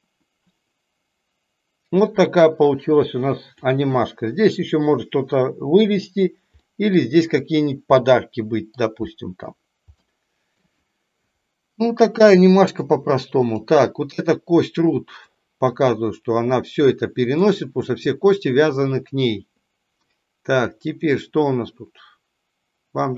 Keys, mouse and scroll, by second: 6.5-6.9 middle drag, 8.0-8.6 middle drag, 8.9-9.4 shift+middle drag, 9.9-10.5 shift+middle drag, 13.4 click, 15.1-17.5 drag, 20.8-23.1 drag.